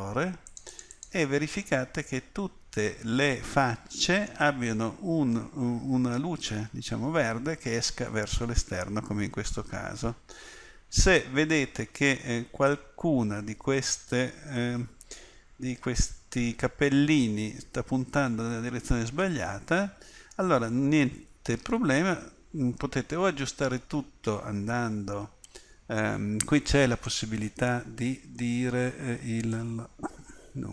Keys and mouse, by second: 1.7-2.7 middle drag, 10.7-11.8 middle drag, 22.0-30.7 drag.